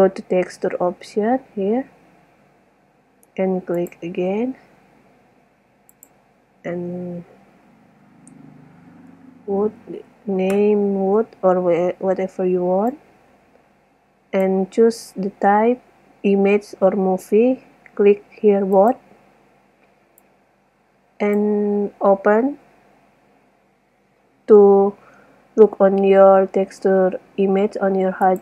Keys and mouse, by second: 4.2 click, 5.7 middle click, 9.5 o, 13.3-15.2 drag, 18.9-22.2 drag.